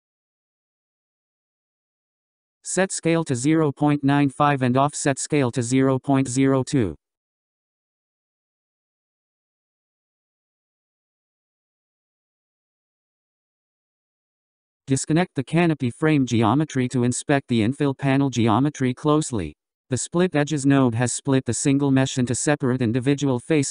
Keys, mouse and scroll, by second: 3.0-4.2 scroll up 13, 5.4-8.2 drag, 8.7-9.9 scroll down 7, 9.9-10.3 scroll up 7, 11.3-13.8 drag, 14.2-15.1 scroll down 12, 15.7 scroll up 5, 16.7-18.0 drag, 18.0-18.4 scroll up 8, 18.7-20.5 middle drag, 20.5 click, 23.1-23.7 drag.